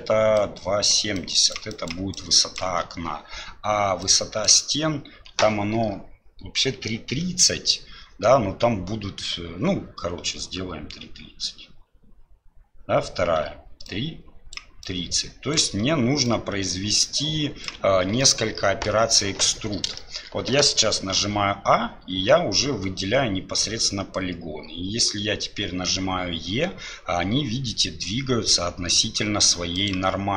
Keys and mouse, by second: 4.0-8.1 drag, 13.9 click, 14.6-18.2 d, 18.2 click, 20.0 shift+click.